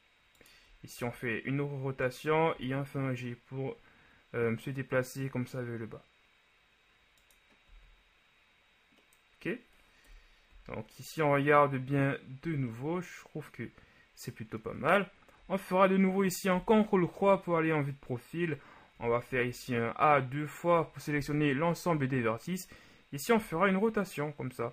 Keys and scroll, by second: 1.1 r, 7.9 z, 10.1 KP_1, 10.5 z, 16.6 ctrl+KP_3, 19.0 a, 19.3 a, 23.5 r.